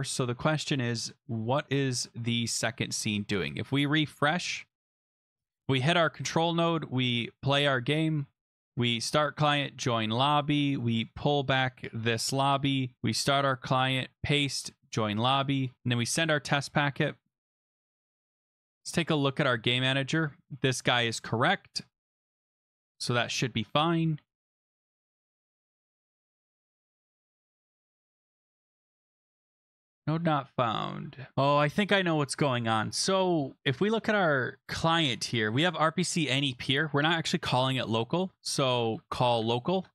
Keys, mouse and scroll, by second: 2.4 click, 2.8 scroll, 3.8 click, 5.0 click, 5.6 click, 7.2 click, 8.5 click, 8.9 click, 9.3 click, 10.3 click, 11.0 click, 11.1 click, 12.0 ctrl+c, 12.4 click, 13.0 click, 13.3 click, 13.6 ctrl+v, 13.7 click, 14.0 ctrl+v, 14.4 click, 15.6 click, 16.0 click, 18.5 click, 18.7-19.1 scroll down 7, 19.4 click, 19.4 scroll, 20.7 click, 21.4 click, 21.9 click, 22.5 click, 24.6 click, 25.2 click, 26.0 click, 26.3 click, 26.5 click, 26.8 click, 28.1 click, 28.4 click, 28.7 click, 28.8 click, 29.0-29.3 scroll, 31.3 click, 33.7 click, 36.0 click, 36.7 Right, 37.5-39.6 typing, 39.7 ctrl+s.